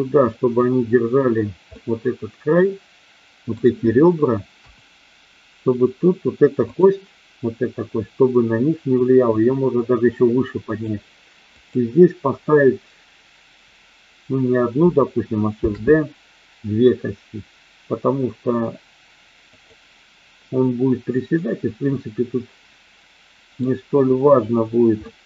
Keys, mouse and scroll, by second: 1.7-3.7 middle drag, 4.4 KP_1, 6.7 click, 8.9-10.8 drag, 11.6 click, 15.6 shift+d, 19.4 click, 21.3-23.7 middle drag, 25.1-25.2 middle drag.